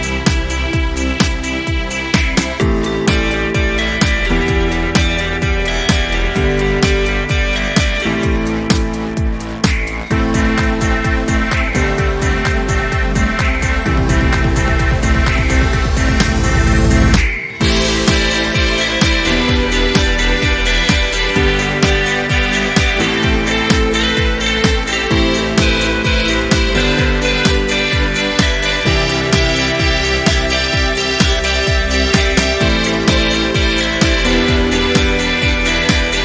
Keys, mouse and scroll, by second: 3.0-3.6 alt+drag, 7.5-8.2 alt+drag, 11.9-12.2 ctrl+scroll down 1, 12.8 click, 13.7 Delete, 14.3 ctrl+scroll down 1, 14.7 space, 14.9 click, 15.3 space, 16.2-16.7 ctrl+scroll down 1, 17.2-19.3 drag, 22.4 ctrl+scroll up 1, 23.3-23.9 ctrl+scroll up 1, 24.0 ctrl+scroll up 1, 24.8-26.0 drag, 26.7-28.9 drag, 29.3-29.7 ctrl+scroll down 1, 30.9 z, 32.2-33.1 alt+drag, 33.9 space, 34.2 click, 34.3-34.8 space, 35.6 p.